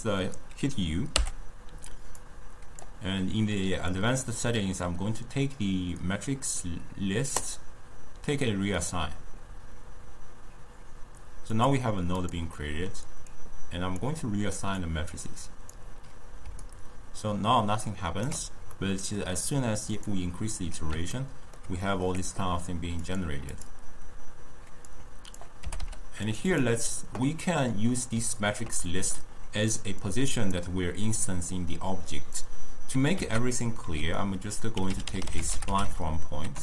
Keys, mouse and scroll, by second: 1.2 u, 12.6 middle click, 13.4-14.9 drag, 16.5 d, 16.7-18.9 right drag, 18.9-20.0 middle drag, 20.0-21.2 drag, 21.2-23.1 ctrl+middle drag, 23.1-25.0 drag, 25.7 g, 26.6 click, 28.4-30.1 ctrl+middle drag, 30.1 drag, 33.2 ctrl+a.